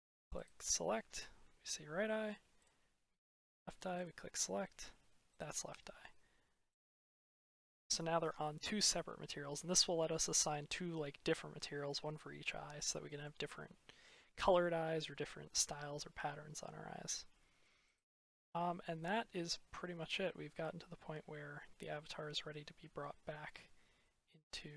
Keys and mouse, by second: 0.3 click, 3.9 click, 7.3 click, 10.1 middle click, 10.8-11.7 middle drag, 12.7-13.1 middle drag, 14.3 drag, 15.7-17.5 drag, 18.6-19.0 drag, 21.2 click, 23.9 drag, 24.1-24.7 middle drag.